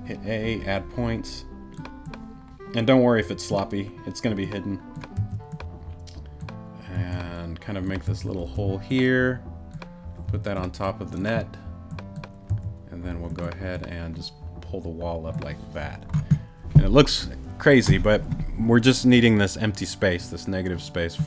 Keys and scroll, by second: 5.1 a, 6.9 a, 8.5 t, 10.2 t, 12.5 a.